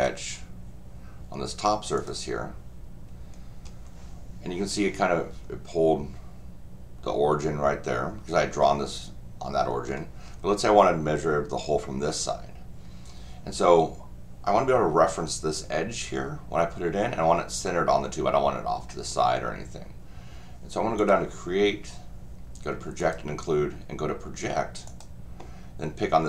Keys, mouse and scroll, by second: 2.0 click, 3.2-3.5 scroll down 2, 3.7 scroll up 2, 4.6-4.9 scroll down 2, 9.6 middle click, 9.7 middle click, 21.0 click, 23.0 click, 24.8 click.